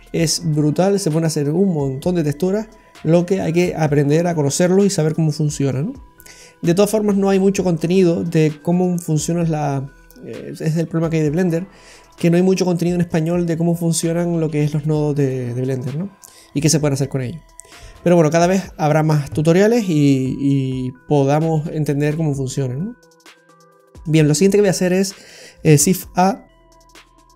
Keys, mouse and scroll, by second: 7.0-7.9 scroll down 2, 7.4 middle click, 18.1-18.6 scroll up 1, 19.8 middle click, 25.6 shift+a.